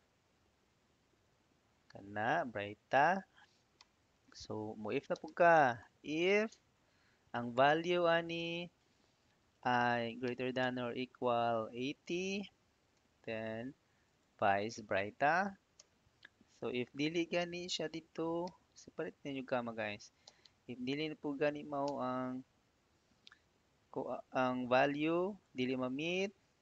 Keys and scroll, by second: 0.1 Down, 0.5 Left, 1.1 Up, 3.6 ', 4.7-5.6 typing, 6.3 Tab, 10.1 shift+., 10.5 =, 12.8 ', 16.7 i, 17.6 BackSpace, 18.3 ', 19.8-21.7 typing, 22.6 Tab.